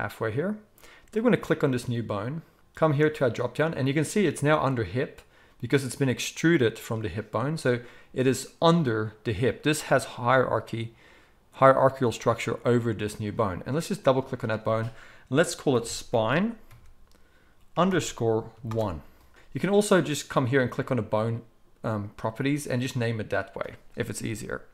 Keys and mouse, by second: 3.2 click, 3.3-14.0 middle drag, 14.0-20.8 drag, 20.8-24.7 middle drag.